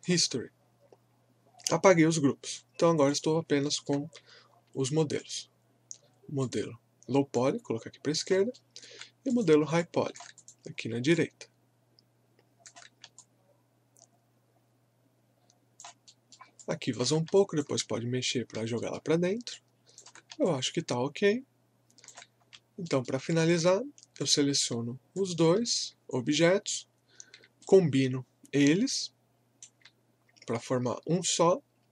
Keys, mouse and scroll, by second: 0.0 click, 2.4 click, 3.7 alt+middle click, 5.2 click, 8.5 alt+middle click, 9.3 click, 9.8 alt+click, 10.8 scroll up 1, 11.1-16.1 alt+drag, 16.1 alt+middle click, 16.6 alt+click, 18.3 scroll up 1, 18.8 alt+middle click, 19.2 scroll down 1, 19.5 alt+click, 20.5-22.4 alt+drag, 22.4 scroll down 1, 22.8 alt+middle click, 23.4 alt+click, 25.2 shift+click, 27.6-31.9 shift+right drag.